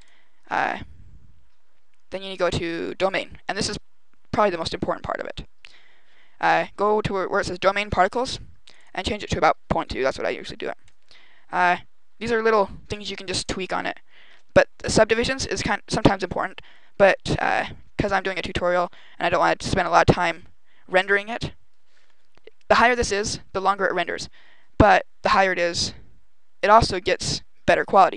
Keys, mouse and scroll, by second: 6.4 click, 8.5 click, 8.7 click, 10.7 click, 11.7 scroll down 2, 12.8 click, 13.2 click.